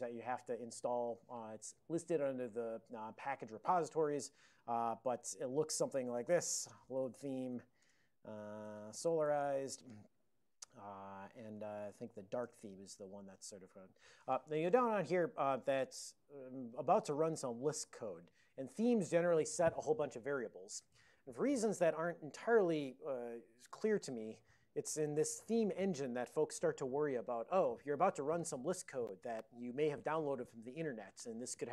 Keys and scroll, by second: 5.2 alt+x, 6.3-9.8 typing, 7.9 Return, 11.8 d, 12.0 Tab, 12.5 Return.